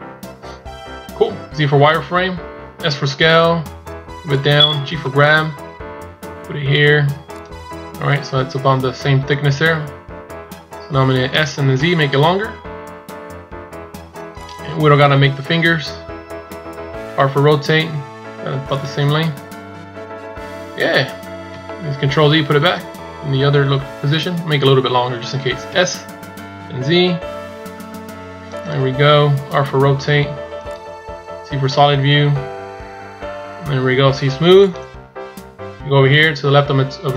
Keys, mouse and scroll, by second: 1.5 z, 2.8 s, 19.2 scroll up 2, 20.7-21.0 scroll down 2, 22.2 ctrl+z, 31.4 z, 32.8 scroll down 1, 34.5 click, 34.5 scroll down 1, 37.0 click.